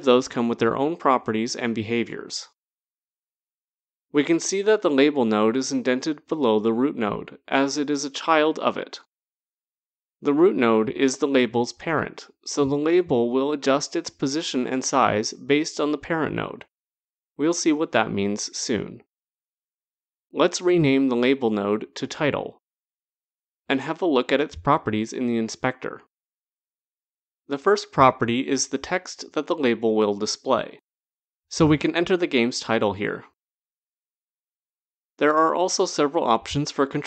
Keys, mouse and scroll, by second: 3.4 click, 20.2 click, 21.4-22.1 typing, 25.0 click, 26.5 click, 30.6-34.4 typing.